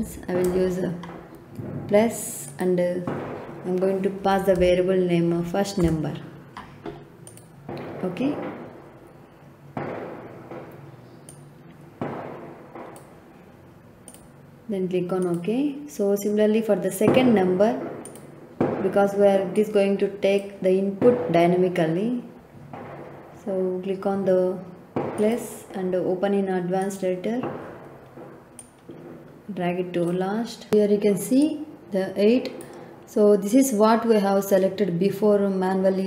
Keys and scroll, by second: 4.0-5.0 typing, 5.8 Return.